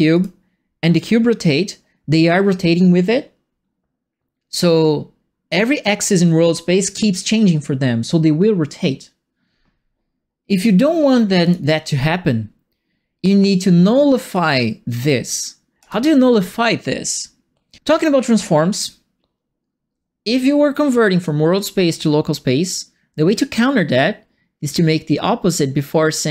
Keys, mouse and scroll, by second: 0.1 click, 11.4 click, 14.3 click, 15.8 click.